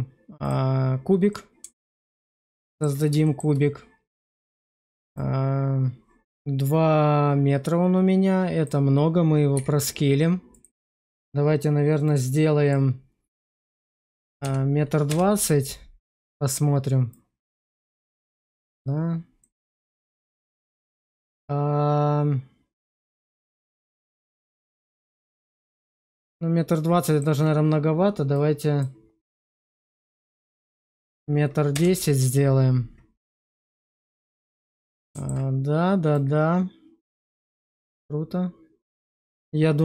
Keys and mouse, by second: 1.2 middle click, 2.4 alt+click, 3.2 shift+click, 5.1-9.5 drag, 9.5 s, 10.4-15.0 drag, 14.3 0, 17.1-19.3 drag, 19.3-27.1 middle drag, 28.2-31.6 drag, 30.9 0, 33.1 alt+middle click, 34.3 middle click, 36.1 click, 39.3-39.8 middle drag.